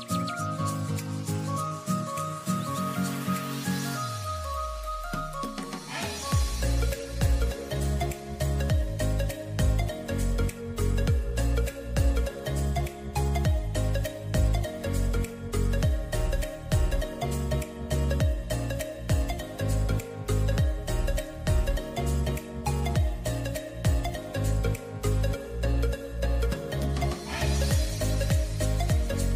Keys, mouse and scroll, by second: 0.2 click, 1.5 shift+d, 4.2 click, 5.1 click, 5.8 click, 7.6 g, 9.9 r, 12.1 click, 13.1 s, 14.3 g, 17.3 click, 17.5 click, 18.7 s, 22.7 click, 23.5 click, 25.2 click, 26.7 shift+d.